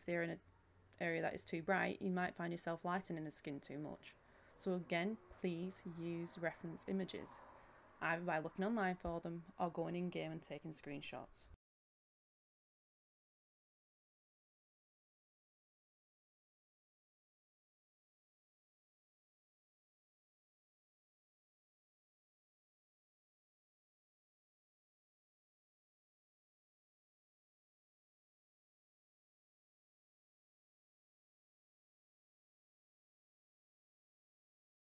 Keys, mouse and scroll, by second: 16.9 Down, 17.0 Down, 17.5 Down, 17.6 Down, 18.9 Down, 18.9 Up, 19.4 Down, 20.1 Up, 20.7-29.8 drag, 30.0 ctrl+z, 30.3-31.8 drag, 31.9-32.4 scroll down 1, 32.4 scroll up 1, 32.7-34.8 drag.